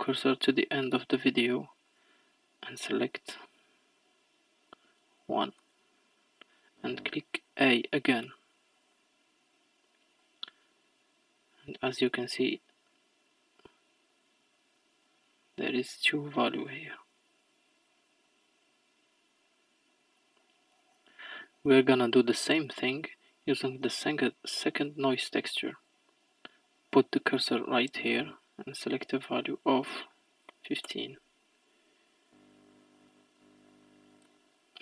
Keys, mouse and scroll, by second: 10.2-13.2 drag, 18.3-34.3 drag.